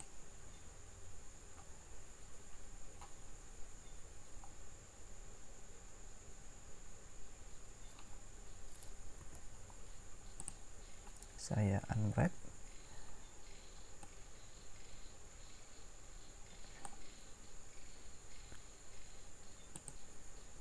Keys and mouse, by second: 10.5 u, 14.0-15.6 right drag.